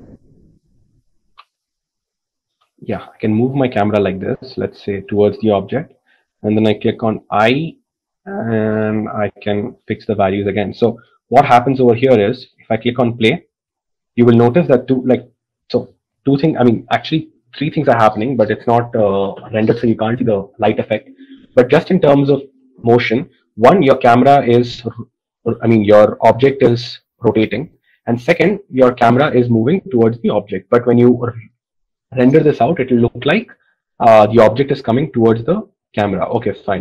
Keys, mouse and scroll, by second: 2.1 ctrl+z, 3.0 g.